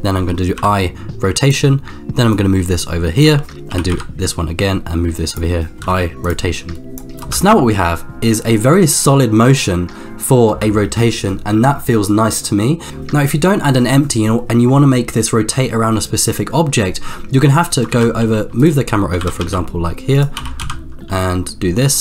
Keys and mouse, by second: 0.5 i, 2.3-3.5 drag, 3.7 r, 5.8 i, 6.9-7.4 drag, 7.4 space, 10.5 space, 12.9 ctrl+shift+z, 17.9 shift+f, 19.1 g, 20.4 r.